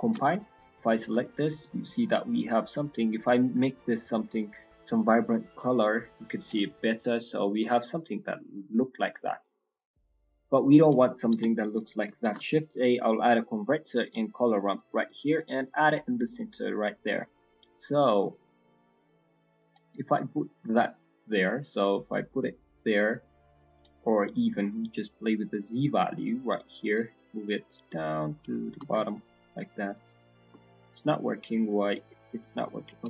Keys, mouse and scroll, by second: 0.0 ctrl+shift+click, 0.3 middle click, 0.7 scroll down 4, 1.0 shift+middle click, 1.2-1.5 scroll up 4, 1.8 shift+middle click, 2.9-4.0 scroll up 7, 3.7 click, 6.6 scroll down 4, 6.9 middle click, 7.7 shift+middle click, 7.9 scroll up 1, 8.3 scroll down 2, 8.4 scroll up 1, 8.5 middle click, 8.9 middle click, 9.0 shift+middle click, 9.3-10.0 scroll down 9, 11.3 click, 11.3 g, 11.8 click, 12.2 shift+a, 15.6-16.9 scroll up 16, 16.2 middle click, 17.1 click, 18.5 click, 19.8 middle click, 20.3-20.7 scroll up 4, 21.0 scroll down 5, 21.2 middle click, 22.1 scroll down 2, 22.2 middle click, 22.5-23.0 scroll up 1, 23.2 click, 23.2-23.9 scroll up 1, 24.0 scroll down 2, 24.2 middle click, 24.4-25.1 scroll up 4, 26.0 middle click, 26.9 click, 29.1 click, 30.8 middle click, 31.9 click.